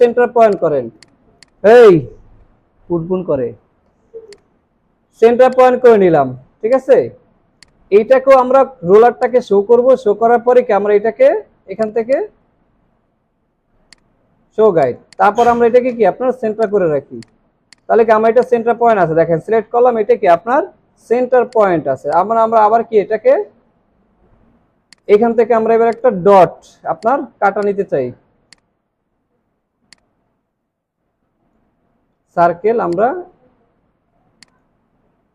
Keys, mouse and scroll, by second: 4.8 alt+scroll up 1, 5.2 alt+scroll down 1, 5.4 space, 6.0 alt+scroll up 3, 6.3 alt+scroll down 1, 6.6 space, 9.2 right click, 15.2 double click, 22.0 right click, 24.5-24.8 alt+scroll up 1, 25.4 alt+scroll up 1, 30.0 alt+shift+click.